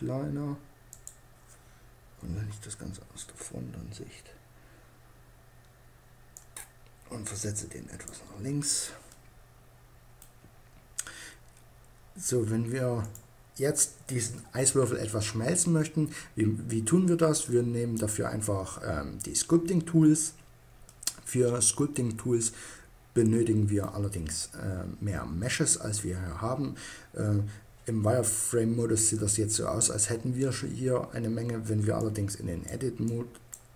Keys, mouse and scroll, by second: 0.4-2.1 drag, 1.6 KP_1, 5.9-7.5 drag, 8.5-10.2 drag, 10.2-12.4 middle drag, 12.4-14.1 drag, 20.3-23.2 middle drag, 31.4-33.0 drag.